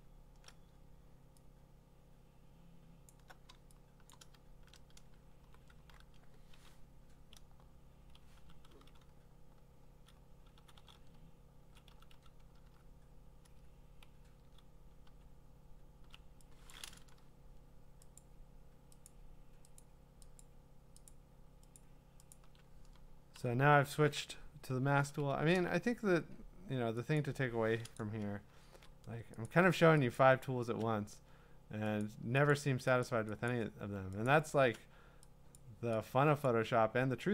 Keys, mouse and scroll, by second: 3.1 click, 4.4 t, 7.0-16.0 typing, 7.1 click, 18.2 click, 19.1 click, 19.8 click, 20.0 alt+click, 20.4 click, 21.1 alt+click, 21.8 alt+click, 22.3 alt+click, 26.5 ], 27.2 click, 28.0 click, 28.7 ctrl+z, 29.5 click, 30.2 shift+click, 31.6 shift+click, 32.0 click, 32.5 shift+click, 33.0 shift+click, 33.5 shift+click, 34.3 click, 35.6 click, 36.5 click.